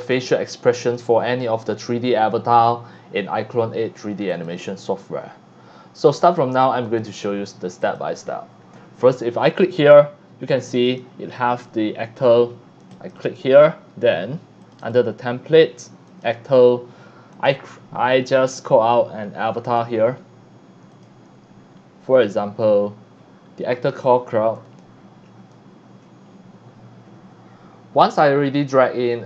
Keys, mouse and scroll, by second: 0.0 click, 0.8 click, 4.3 click, 5.9 click, 6.8 click, 7.8 click, 9.5 click, 10.9 click, 12.9 click, 13.5 click, 14.6 click, 14.8 click, 16.1 click, 17.3 click, 19.6 click, 21.0 click, 24.6 click, 25.2 click, 27.7-28.8 scroll up 5, 29.1 scroll down 1.